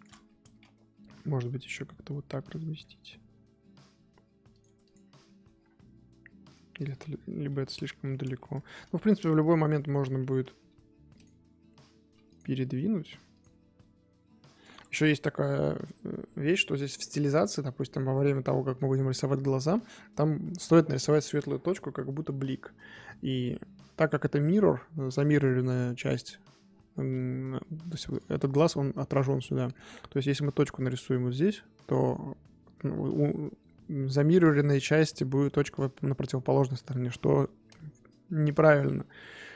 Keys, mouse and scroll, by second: 4.8 click, 5.0 scroll down 1, 5.2 scroll up 1, 5.2-5.6 middle drag, 5.6 scroll down 1, 5.8-6.7 middle drag, 6.7-7.5 scroll up 3, 6.9 KP_1, 7.5 Tab, 8.3 Tab, 8.6 shift+click, 9.4 shift+click, 9.7 Tab, 15.0 click, 15.3 scroll down 3, 15.4-16.0 middle drag, 16.0-17.0 scroll up 1, 17.0-17.4 middle drag, 17.4-19.7 scroll up 2, 22.8-23.9 middle drag, 23.9 click, 26.1-26.5 scroll down 2, 26.5-30.0 middle drag, 30.0-32.9 scroll up 2.